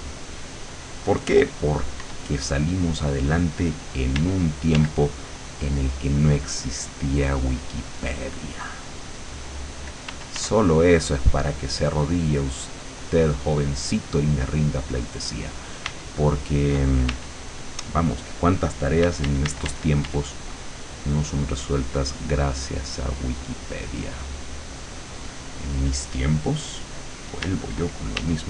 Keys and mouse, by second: 2.1 w, 4.2 d, 5.3 click, 10.1 f, 10.6-14.2 drag, 15.9 d, 17.1 w, 19.1 d, 20.5-25.2 drag, 27.5 d, 28.3 w.